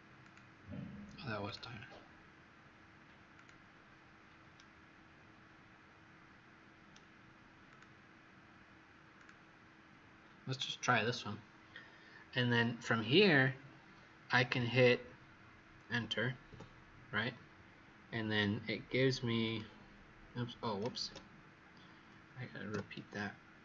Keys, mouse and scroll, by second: 4.5 right click, 7.6 click, 16.4 Return, 19.4 click, 20.9 ctrl+z, 22.7 Return.